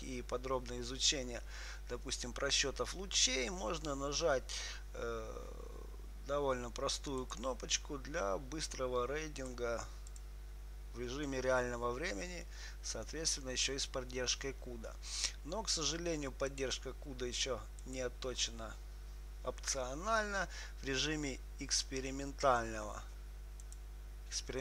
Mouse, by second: 7.5-9.5 drag, 9.7-11.6 drag, 12.8-14.8 middle drag, 16.9-21.8 drag, 23.9-24.6 drag.